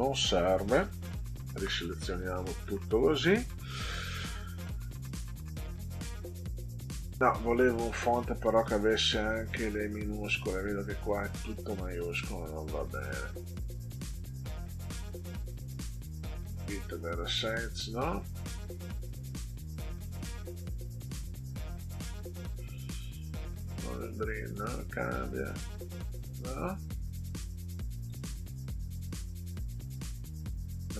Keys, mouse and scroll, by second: 1.6 shift+Up, 6.3 click, 7.7 click, 11.3 click, 11.9 scroll down 2, 12.9 click, 14.8 click, 16.3 click, 17.8 click, 18.2 scroll down 2, 19.4 click, 23.6 click, 24.8 click, 26.6 click, 28.0 click, 30.6 click.